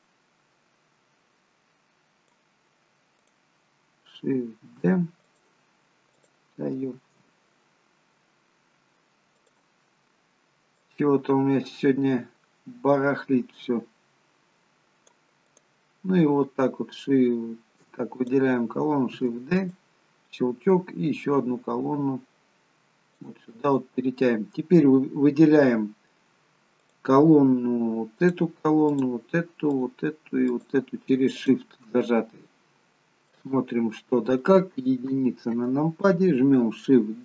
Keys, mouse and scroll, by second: 3.3 click, 4.7 shift+d, 5.2 click, 6.1 click, 7.0 shift+d, 10.8 click, 15.5 click, 18.2 click, 19.2 shift+d, 20.7 click, 23.6 click, 27.5 click, 28.3 shift+click, 29.9 shift+click, 33.0-34.5 scroll down 2, 33.4 middle click, 35.1 KP_1.